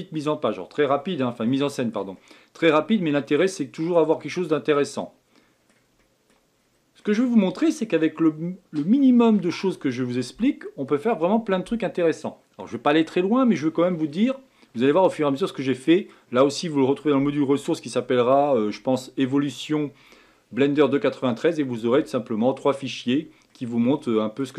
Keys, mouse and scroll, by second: 1.4-4.1 shift+middle drag, 4.1-4.5 scroll down 1, 4.5-6.5 middle drag, 6.5 scroll up 4, 7.0-10.1 middle drag, 14.1-18.8 middle drag, 23.5-24.5 middle drag.